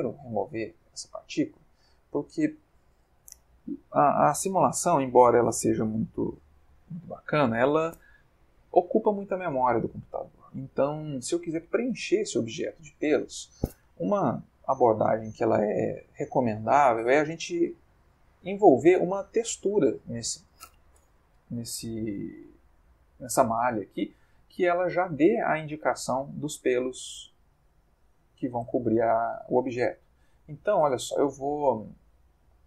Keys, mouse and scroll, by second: 0.2 click, 1.3-2.5 middle drag, 22.4 middle click, 22.5 click, 22.9-24.3 middle drag, 25.8-26.7 middle drag, 27.2-29.1 middle drag, 29.1 ctrl+shift+Tab, 29.9 middle click.